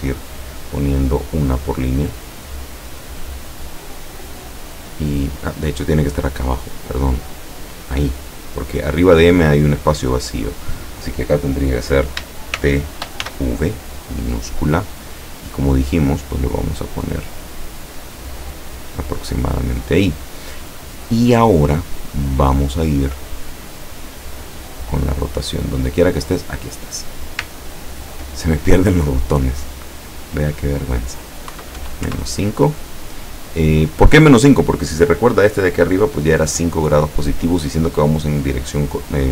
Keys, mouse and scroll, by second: 3.1 click, 6.9 click, 12.6 shift+t, 15.2 click, 16.7-19.2 drag, 26.4 click, 27.7 ctrl+scroll up 2, 28.6 ctrl+click, 31.5 KP_Subtract, 31.8 KP_5, 32.1 KP_Enter.